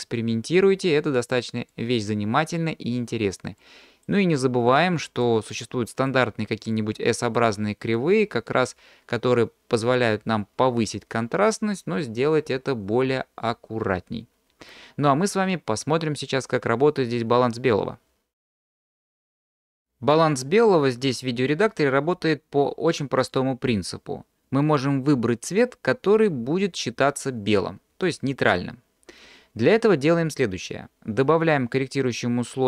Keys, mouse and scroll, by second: 3.6 click, 4.7 click, 6.0 click, 6.7 click, 8.0 click.